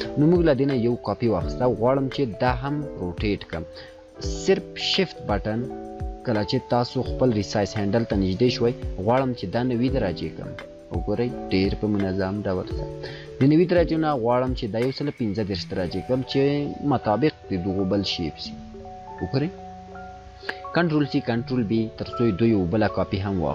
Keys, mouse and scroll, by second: 0.2 click, 4.7 click, 19.1 click, 21.7-23.5 drag.